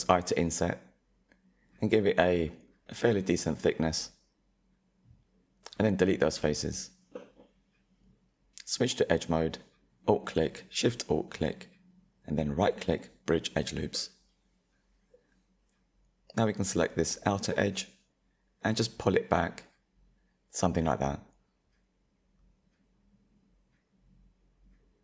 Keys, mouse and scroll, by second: 3.6 Delete, 6.3-7.8 middle drag, 7.8-8.9 drag, 9.8 alt+shift+click, 10.8-13.0 right drag, 13.0-15.4 middle drag, 15.4 alt+click, 17.1 click, 20.6-24.3 middle drag, 24.3 alt+click, 24.7-25.0 middle drag.